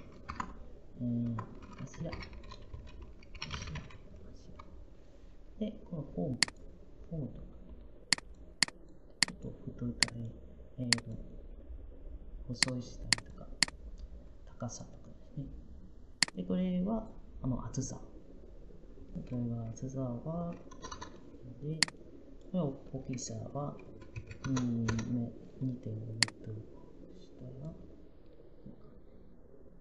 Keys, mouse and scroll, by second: 0.0-0.1 typing, 2.9-4.1 typing, 20.0-21.1 typing, 23.5-25.2 typing.